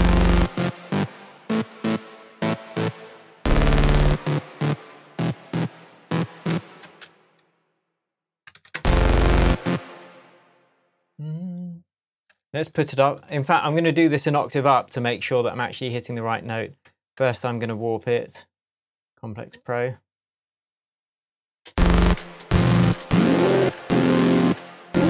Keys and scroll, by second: 6.5 BackSpace, 6.8 space, 8.6 super+d, 8.7 super+space, 9.6 space, 17.2 super+z, 21.7 space.